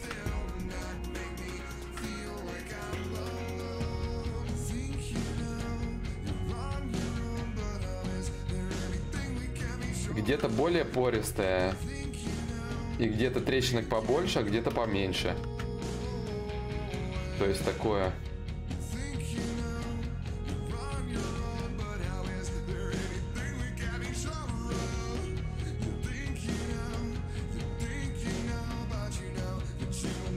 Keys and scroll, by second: 3.8 ctrl+z, 4.4 x, 6.2 d, 24.7 ctrl+z, 25.7 x, 28.0 ctrl+z, 28.4 x.